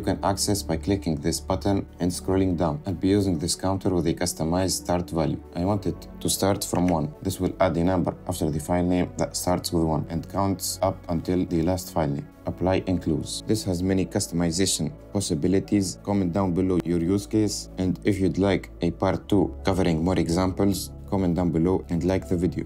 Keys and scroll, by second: 7.5 BackSpace.